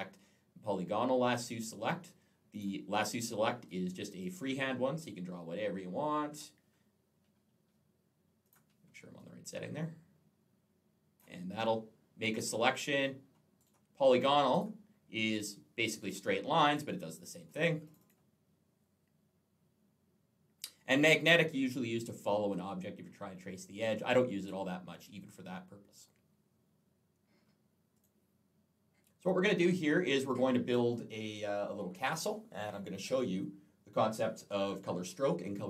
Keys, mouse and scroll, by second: 2.4 click, 4.1 click, 8.3 click, 9.0 click, 13.5 right click, 14.3 click, 15.1 click, 15.9 click, 16.4 click, 16.5 click, 17.0 click, 17.7 click, 17.8 click, 17.9 double click, 20.8 right click, 27.8 click.